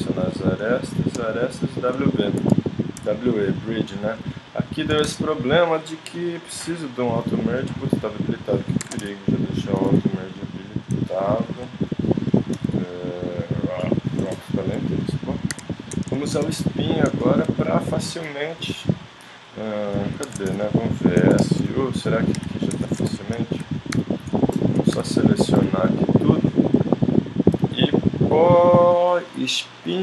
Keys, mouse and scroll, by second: 2.4 w, 2.9 click, 5.1 shift+Tab, 6.2 click, 7.4 click, 8.8 ctrl+Tab, 9.7 g, 11.3 middle click, 11.9-13.5 drag, 12.5 g, 14.3 middle click, 15.5 KP_1, 20.2 ctrl+Tab, 21.3 shift+s, 22.4-25.6 typing, 27.5 KP_7, 29.5 click.